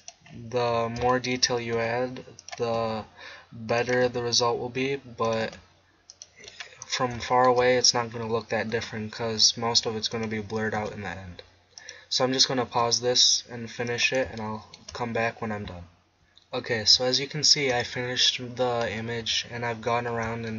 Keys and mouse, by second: 1.8 e, 2.8 e, 4.0 e, 5.4 e, 8.7 e, 10.8 e, 12.7 e, 18.8-20.5 middle drag.